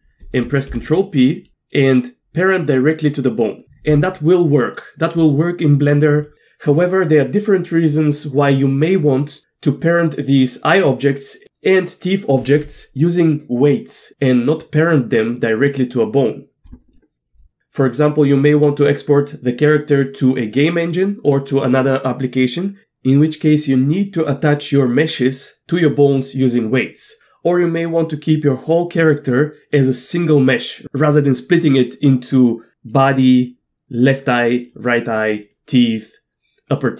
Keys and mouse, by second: 0.7 ctrl+p, 35.5-36.9 drag.